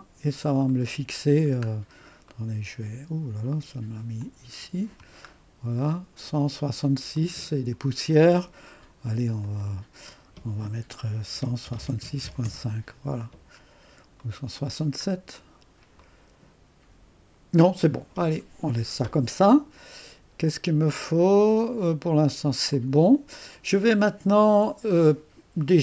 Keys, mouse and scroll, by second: 4.2 click, 5.3-5.8 scroll up 1, 5.8 right click, 6.1 middle click, 6.3 right click, 9.4 click, 9.6 click, 11.1-12.7 typing, 14.2 click, 15.1 right click, 15.5-15.9 scroll down 1, 15.5 typing, 15.9-17.0 scroll up 1, 22.7 click.